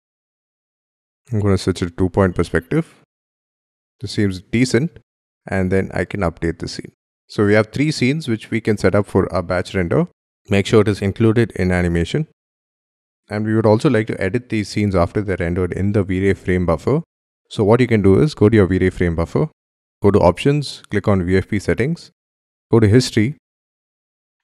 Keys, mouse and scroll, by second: 0.0-0.2 typing, 0.5 shift+middle click, 6.0 right click.